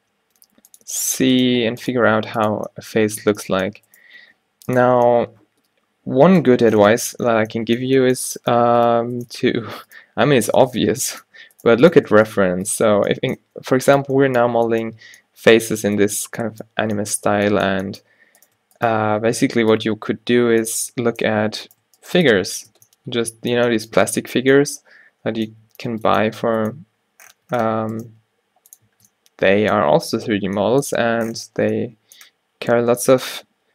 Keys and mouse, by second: 0.1 g, 2.2 g, 4.1 g, 8.5-13.2 drag, 8.8 g, 10.4 g, 10.9 g, 13.5 f, 14.6 Tab, 17.4 Tab, 19.8 f, 20.3 Tab, 21.3 Tab, 21.7-23.0 drag, 22.4 f, 22.8 Tab, 24.1 Tab, 26.0 Tab, 27.4 Tab, 28.2 g, 29.0 Tab, 33.0 Tab.